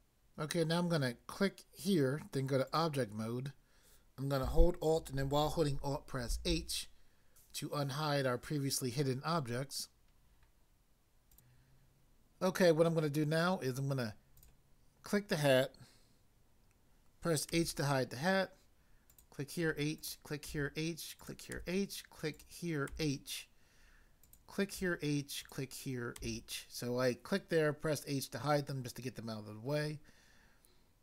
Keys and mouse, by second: 1.8 click, 2.7 click, 6.3 alt+h, 11.3 click, 11.5 click, 14.3 click, 17.5 h, 19.1 click, 19.7 h, 20.0 click, 20.5 h, 21.1 click, 21.5 h, 22.3 click, 22.9 h, 24.3 click, 25.4 click, 26.2 h.